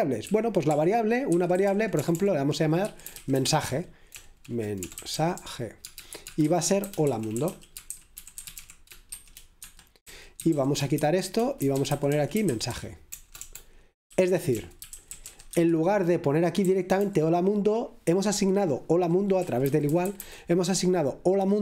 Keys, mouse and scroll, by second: 0.3 k, 2.0 typing, 3.2-15.1 typing, 9.6 Escape, 16.7-17.4 typing, 19.4-20.1 typing.